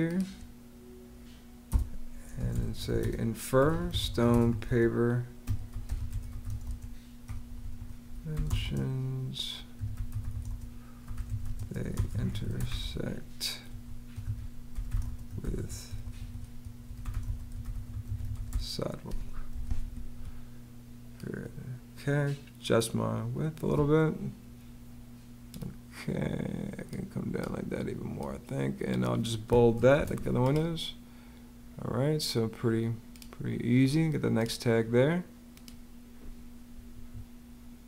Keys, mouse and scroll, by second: 1.5 Return, 2.0-19.5 typing, 29.8 super+b, 36.7 Escape.